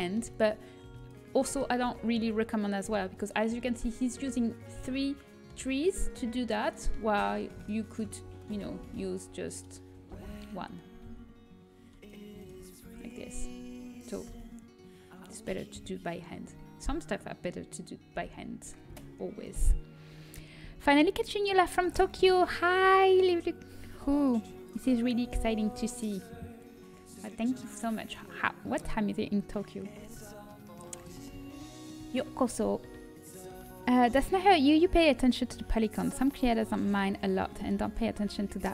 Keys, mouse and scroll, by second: 1.0-2.8 drag, 6.5-8.8 right drag, 8.8 Delete, 9.1 click, 9.7-11.2 drag, 11.0 Delete, 12.3-15.0 right drag, 12.7 f, 14.2 a, 15.7 Delete, 18.0 l, 18.8 Delete, 27.0-31.6 middle drag.